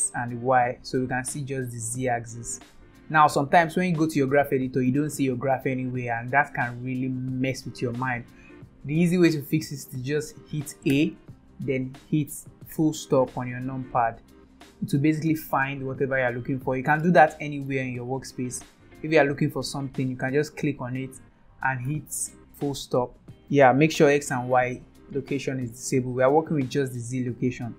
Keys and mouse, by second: 0.4-1.5 drag, 1.9 click, 3.8 middle click, 5.1 middle click, 10.9 a, 12.7 KP_Decimal, 17.4 middle drag, 19.9 click, 21.8 KP_Decimal, 22.8 middle click, 24.5 click, 26.4 click.